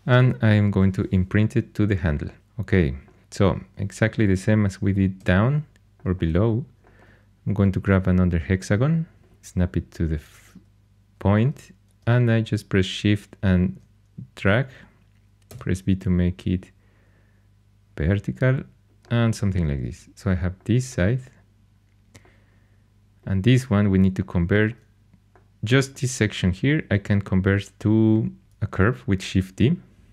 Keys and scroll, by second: 0.6 shift+Tab, 5.1 x, 15.4 v, 28.4 shift+d.